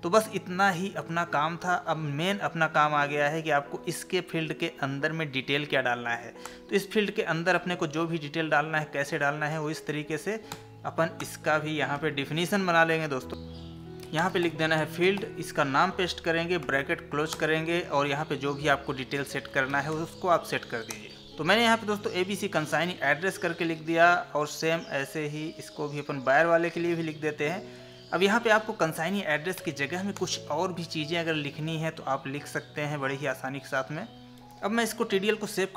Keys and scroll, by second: 9.1 ctrl+c, 14.8 Tab, 15.9 ctrl+v, 20.9 space, 28.0 ctrl+c, 31.1 ctrl+v, 34.4 ctrl+s.